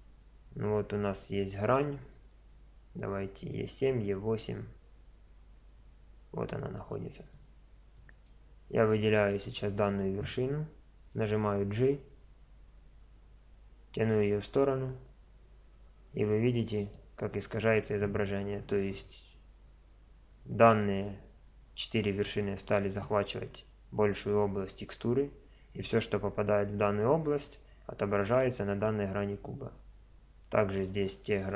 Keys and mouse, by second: 0.0 middle click, 0.9-1.9 middle drag, 3.4-11.1 middle drag, 11.1 g, 29.5-30.5 middle drag, 30.5-31.5 middle drag.